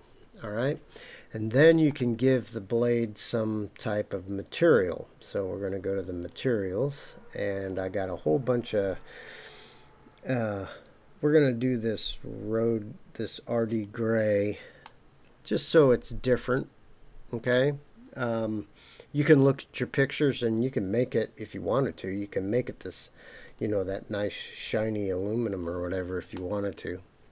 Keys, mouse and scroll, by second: 6.2 click, 7.7-13.8 drag, 14.8-17.5 middle drag, 23.4-25.6 drag, 26.3-27.3 middle drag.